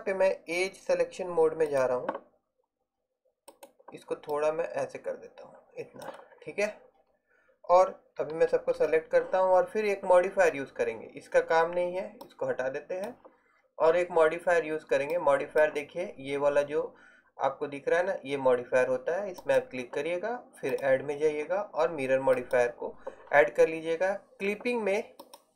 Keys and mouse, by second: 4.4 middle click, 5.7 click, 8.4 a, 8.9 a, 22.6-25.3 middle drag.